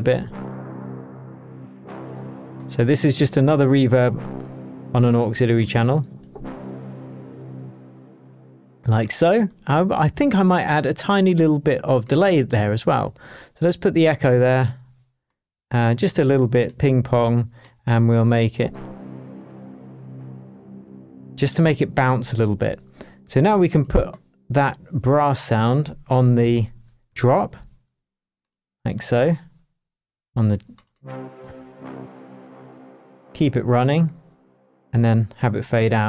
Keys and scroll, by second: 26.4 shift+super+m, 27.1 shift+super+Tab, 27.6 shift+Tab, 31.6 shift+Down, 35.8 shift+Tab.